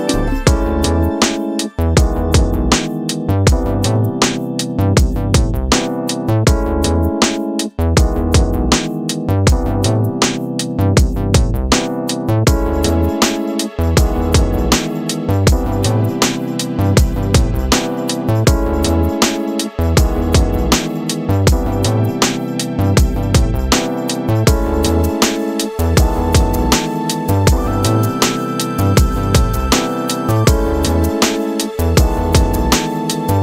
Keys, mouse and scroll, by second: 8.0 double click, 32.5 shift+click, 33.3 ctrl+g.